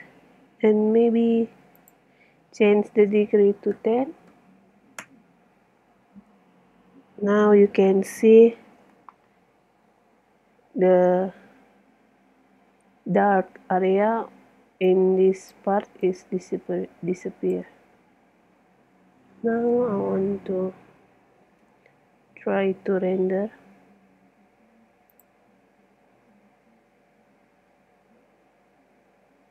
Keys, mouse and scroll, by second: 1.8-3.7 drag, 9.1-15.6 middle drag, 14.9-17.9 drag, 18.0-20.7 middle drag, 19.7 KP_0, 21.7 n, 23.6-25.2 middle drag, 25.2-26.8 drag.